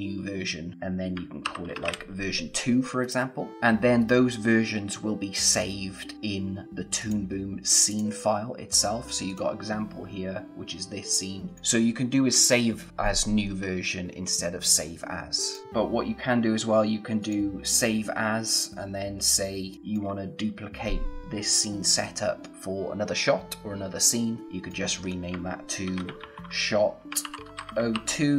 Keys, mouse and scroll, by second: 1.4-2.4 typing, 3.0 click, 7.0 click, 11.5 click, 15.4 click, 17.2 click, 19.7 click, 24.4 click, 25.7-28.3 typing.